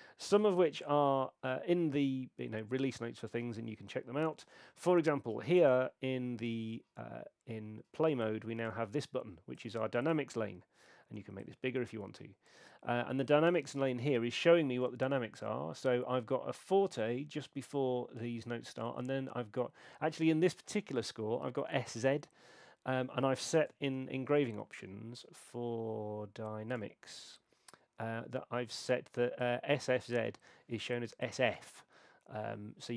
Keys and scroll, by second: 0.6 super+4, 23.9 shift+super+e.